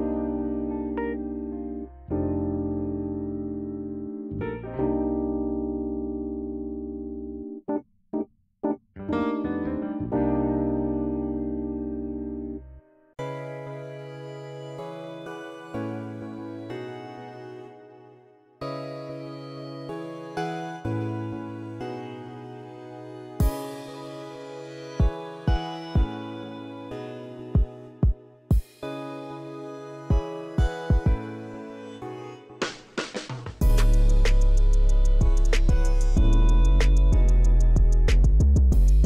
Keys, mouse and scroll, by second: 0.3 click, 1.1 click, 2.0 KP_8, 2.1 KP_5, 2.3 Return, 3.3-3.8 scroll down 2, 3.7 middle click, 3.9-4.4 middle drag, 4.6 middle click, 4.6 scroll up 1, 5.2 middle drag, 5.4 scroll up 1, 6.1-7.0 scroll down 2, 8.8 click, 9.4 KP_0, 9.7 KP_3, 9.9 Return, 11.0 scroll down 1, 11.4 scroll up 1, 12.4 click, 13.1 KP_0, 13.3 KP_1, 13.6 Return, 15.4-15.9 middle drag, 16.7 click, 17.3 KP_0, 17.4 KP_3, 17.7 Return, 18.4-19.2 scroll down 2, 19.9 Escape, 20.7-21.1 scroll up 1, 21.3-21.8 middle drag, 22.5 click, 23.8 click, 25.6 click, 27.3 middle click, 29.5 click, 31.3 click, 33.3-34.7 scroll down 2, 36.6 middle click, 37.3-38.6 scroll up 1, 38.6-39.0 scroll down 1.